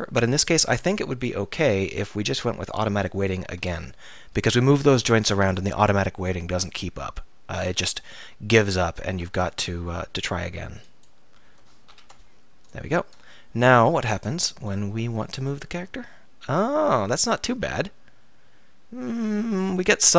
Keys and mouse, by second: 0.5-1.9 drag, 2.3-8.7 drag, 9.8-11.9 drag, 11.9 ctrl+p, 14.0-17.4 middle drag, 16.0 r.